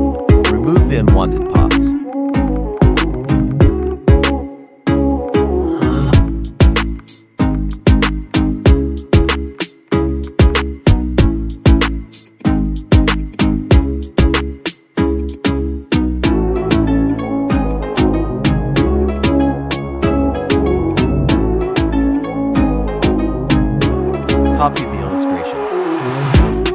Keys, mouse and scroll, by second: 0.1 right click, 0.4 click, 0.7 right click, 1.0 click, 1.4 right click, 1.8 click, 2.3 Delete, 2.4 click, 2.6 Delete, 2.7 click, 2.8 Delete, 2.9 click, 3.0 Delete, 3.5 click, 3.8 right click, 5.1 Delete, 5.2 click, 5.4 Delete, 5.8 click, 5.9 Delete, 5.9 click, 6.0 Delete, 6.2 click, 6.3 Delete, 6.9 click, 7.2 Delete, 7.4 ctrl+z, 7.5 click, 7.7 Delete, 8.0 click, 8.1 Delete, 8.3 click, 8.7 Delete, 9.1 ctrl+z, 9.2 right click, 9.5 click, 9.6 scroll up 1, 9.8 click, 10.2 shift+click, 10.7 ctrl+c, 10.8 ctrl+a, 11.0 Delete, 11.3 ctrl+v, 11.5 ctrl+z, 12.2 click, 13.8 Delete, 15.1 click, 17.0 Delete, 17.5 click, 17.8 Delete, 18.9 click, 19.2 Delete, 20.6 click, 23.2 Delete, 24.0-26.7 drag.